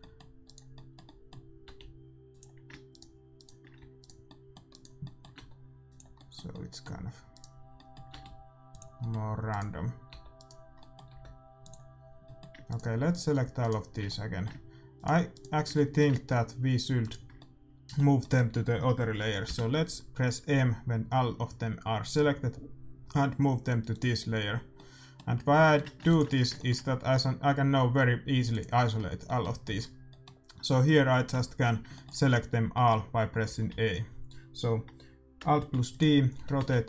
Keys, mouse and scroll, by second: 0.0-1.4 right drag, 0.7-3.0 middle drag, 1.6 r, 3.0-5.8 right drag, 3.8 a, 5.0-7.6 middle drag, 5.3 r, 7.6-8.9 drag, 7.6-9.1 right drag, 8.1 r, 9.1 middle click, 9.8-11.2 right drag, 11.0 r, 11.2 middle click, 12.8-21.5 middle drag, 12.8-19.4 right drag, 19.4 m, 24.7-28.5 middle drag, 26.0 ctrl+s, 28.5-30.8 drag, 29.2-34.4 middle drag, 29.6 a, 31.3 a, 33.4 a, 33.7 a, 35.7 alt+d, 36.3 r.